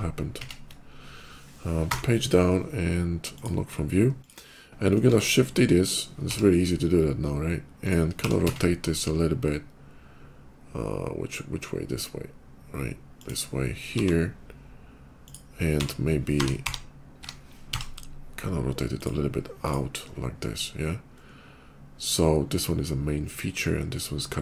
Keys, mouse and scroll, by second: 0.2 ctrl+z, 1.7 Page_Down, 3.2 click, 3.9 click, 4.9 shift+d, 5.6 click, 5.9 r, 7.6 click, 8.3 z, 13.0 click, 13.8 g, 15.1 click, 15.6 r, 16.2 y, 16.5 y, 17.6 x, 18.8 click, 19.4 click, 21.0 middle click, 22.5 middle click, 23.8 middle click.